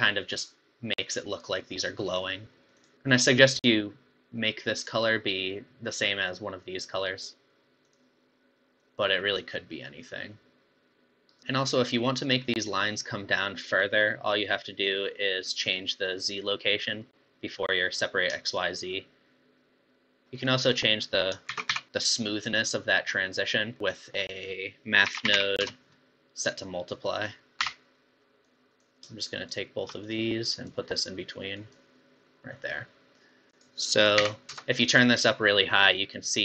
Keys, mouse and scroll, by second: 0.0 Left, 2.8 click, 7.8 click, 11.4 middle click, 13.6 scroll down 5, 13.9-15.5 middle drag, 15.5-16.0 scroll up 6, 18.5-20.2 shift+drag, 20.2 middle click, 20.6-21.0 scroll up 4, 21.0 middle click, 21.5 shift+a, 27.1-29.2 drag, 29.2 shift+right click, 30.1 click, 32.5 click, 33.5-36.4 drag.